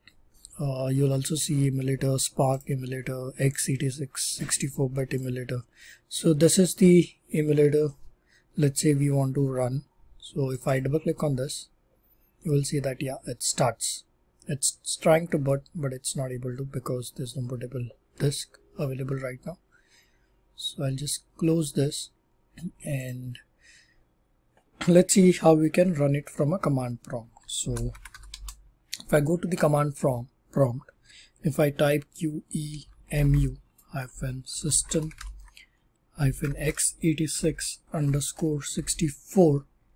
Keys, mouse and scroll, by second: 2.5 click, 2.5 scroll down 10, 3.5 click, 4.3 click, 5.1 click, 10.5 click, 10.7 click, 23.0 click, 27.6 super+r, 27.6-28.6 typing, 31.5-38.7 typing.